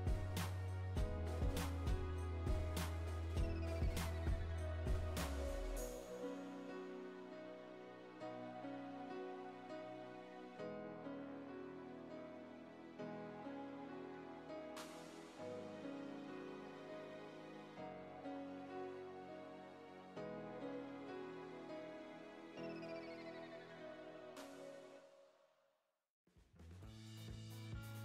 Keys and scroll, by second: 14.5 Right.